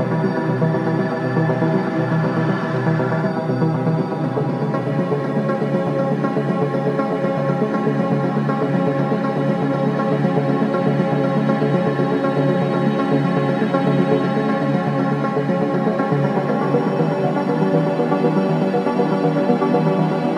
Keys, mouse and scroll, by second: 3.2-5.4 right drag, 5.4 click, 6.1 alt+middle click, 7.2 click, 12.7-16.1 drag, 17.3-19.9 right drag, 19.9 click.